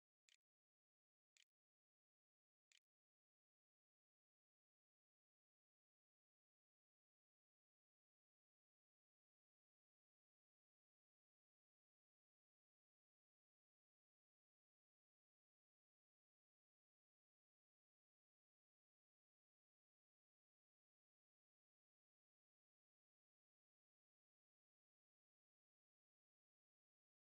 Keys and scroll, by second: 0.0-3.7 typing.